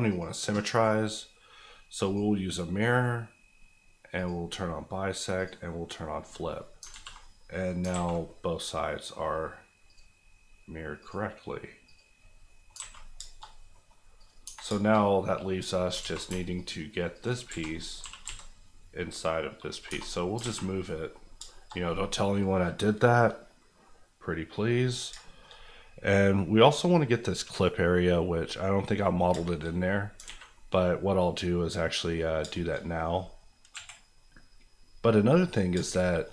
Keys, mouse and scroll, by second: 6.5 middle click, 6.8 alt+middle click, 6.9 alt+z, 7.2 middle click, 7.8 alt+middle click, 7.9 alt+a, 8.2 middle click, 9.1-9.9 scroll up 1, 9.9 click, 12.4 middle click, 12.7 alt+scroll up 1, 12.9 a, 13.2 shift+middle click, 13.4 shift+scroll up 2, 13.7 middle click, 14.2 click, 14.4 Tab, 14.7 shift+middle click, 14.9-15.5 shift+scroll up 2, 15.5 middle click, 15.8 scroll up 2, 16.0 alt+z, 16.6 alt+click, 17.4 alt+z, 17.7 scroll up 1, 18.0 g, 18.2 x, 19.7 click, 19.9 Tab, 20.1-20.7 scroll down 2, 20.4 alt+a, 20.8 middle click, 21.2 scroll down 2, 21.5 shift+middle click, 21.7 middle click, 24.7-25.3 scroll up 2, 25.3 shift+middle click, 25.5 middle click, 27.3 click, 27.8 middle click, 29.3 shift+middle click, 29.6 middle click, 29.9 scroll down 2, 30.2 alt+a, 30.5 middle click, 32.4 shift+middle click, 32.7 middle click, 33.7 KP_1, 35.7 shift+KP_1, 35.9 shift+middle click.